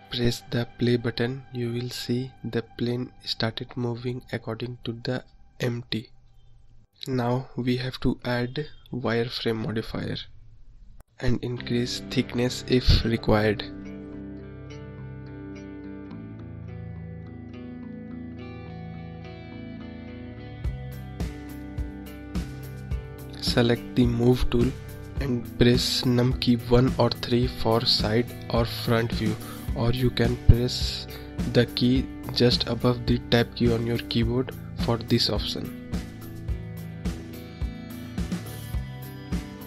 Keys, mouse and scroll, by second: 0.3 middle click, 0.7-2.4 scroll down 2, 3.3-6.9 drag, 8.6-9.9 drag, 10.9-13.9 drag, 14.5-16.5 middle drag, 16.5-18.6 drag, 18.6-21.4 middle drag, 21.4 click, 25.0-26.1 drag, 26.1-26.5 scroll up 1, 26.5-28.1 scroll down 2, 28.1-28.8 scroll up 1, 28.8-31.3 middle drag, 31.3-33.1 scroll up 2, 33.1 KP_3, 34.9-36.7 scroll up 4, 36.7-37.3 scroll down 3, 37.5 `, 37.6 `.